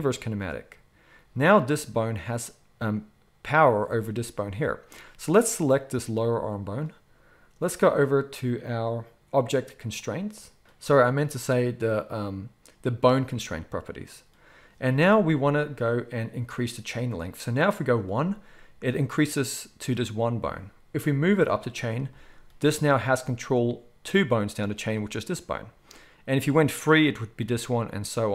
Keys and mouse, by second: 0.0-1.4 middle drag, 1.4 click, 1.5-3.7 middle drag, 3.7-4.3 drag, 4.3-5.6 middle drag, 5.6-13.2 drag, 13.2-17.8 middle drag, 17.8-24.6 drag, 24.6 middle drag, 24.9 click, 25.0-26.6 middle drag, 26.6 click, 26.8-28.3 middle drag.